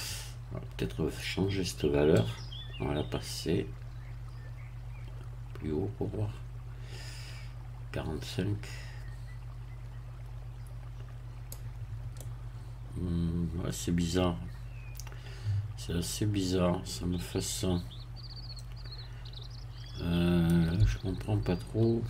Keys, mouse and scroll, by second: 2.2-11.7 drag, 12.2-20.7 middle drag, 20.8 Tab.